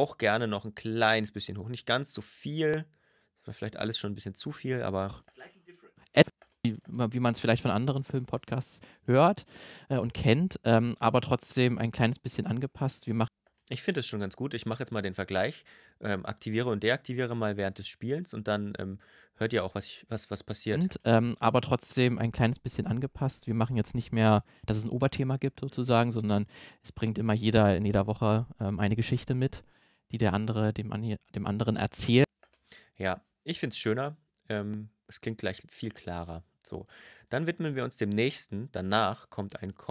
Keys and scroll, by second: 4.9 space, 13.0 space, 20.5 space, 32.0 space.